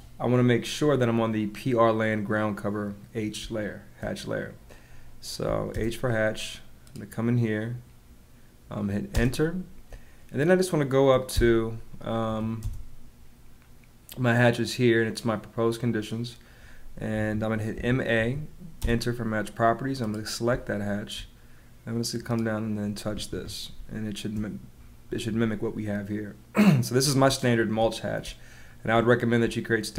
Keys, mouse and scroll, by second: 3.4 space, 5.4 h, 5.6 space, 9.0 space, 11.9 m, 12.2 a, 12.5 space, 17.1 Escape, 17.7 m, 18.1 a, 18.8 space, 20.4 space, 23.2 Escape, 23.7 space, 27.4 space, 29.4 space.